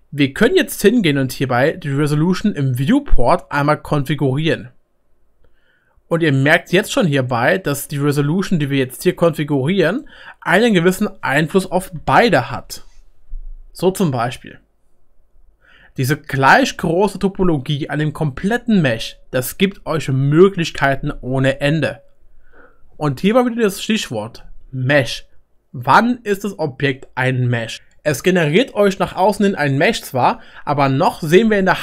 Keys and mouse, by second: 3.0-5.6 middle drag, 3.3-5.6 drag, 6.1 click, 6.1 middle click, 6.1 right click, 6.6-8.9 drag, 6.6-8.9 middle drag, 6.6-8.9 right drag.